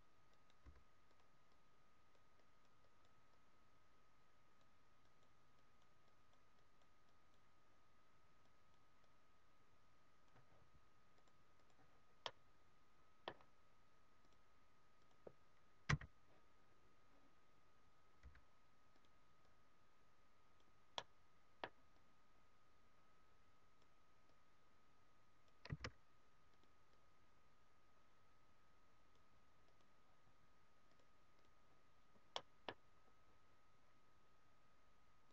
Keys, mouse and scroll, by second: 0.5 right click, 0.7 f, 1.2 click, 2.3-10.7 click, 11.1 click, 12.2 middle click, 15.2 click, 20.9 middle click, 25.7 shift+f, 29.8 click, 30.8 click, 31.9-32.3 scroll down 1, 32.3 middle click, 33.1 scroll up 1, 35.2 click.